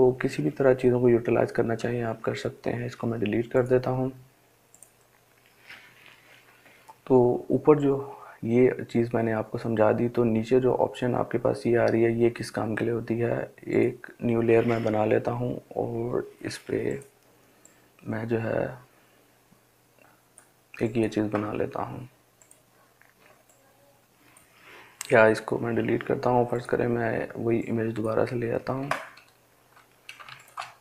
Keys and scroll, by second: 1.0 Delete, 24.4 Delete.